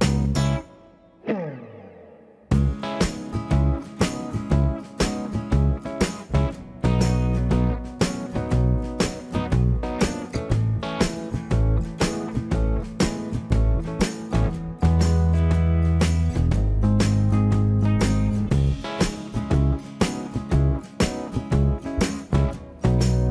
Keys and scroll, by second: 11.4 space, 11.5 Escape.